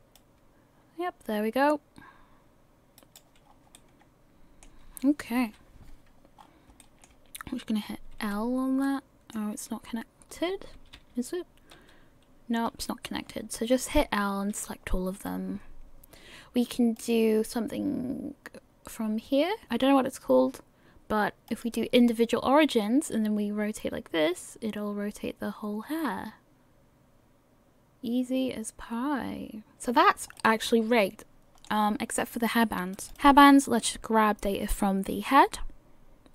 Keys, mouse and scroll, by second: 0.1 click, 3.4-4.1 scroll down 4, 3.7 middle click, 5.4 KP_3, 6.4 scroll up 5, 6.8 shift+middle click, 8.5 l, 8.8 middle click, 9.7 l, 10.8 a, 12.0 l, 14.1 l, 15.6-16.9 scroll down 2, 16.9 click, 23.1 click, 30.0 scroll down 4, 30.4 middle click, 31.9-32.9 scroll up 1, 32.9 click, 33.9 click.